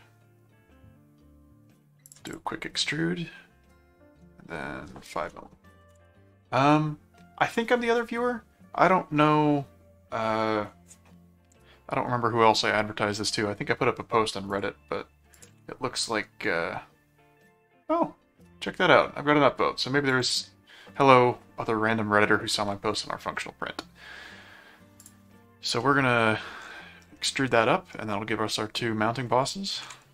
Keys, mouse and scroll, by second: 2.0 click, 14.5 click, 15.4 ctrl+click, 15.9 ctrl+r, 20.1 click, 25.0 click, 25.8 middle click, 27.2 middle click, 29.7 ctrl+5.